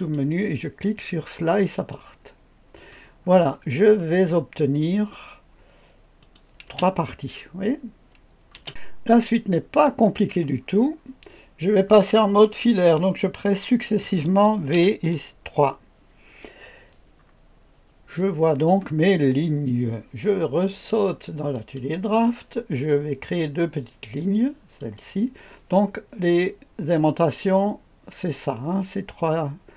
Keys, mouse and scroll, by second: 1.7 click, 3.2-4.0 scroll up 2, 4.0-4.4 right drag, 6.2 click, 6.7 space, 8.5 space, 9.1-10.0 drag, 10.6-11.0 scroll up 1, 11.0-14.7 scroll down 1, 14.7 v, 15.0 KP_3, 17.2-18.7 scroll up 1, 18.1 middle click, 18.8 right click, 19.0-20.6 scroll up 1, 20.6 click, 21.5 click, 24.8 click.